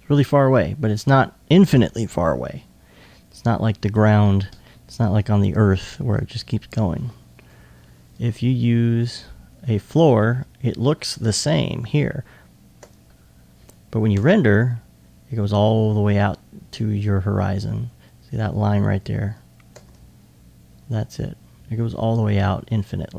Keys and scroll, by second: 2.9 2, 10.5 s, 11.2 alt+s.